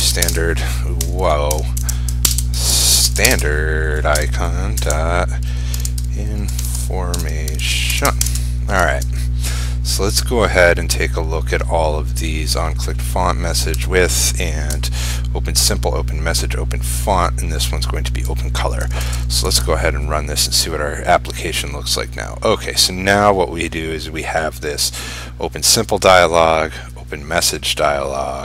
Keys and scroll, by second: 0.3 ctrl+space, 3.4 ctrl+space, 8.9 ctrl+s, 19.2 ctrl+shift+s, 19.6 ctrl+r.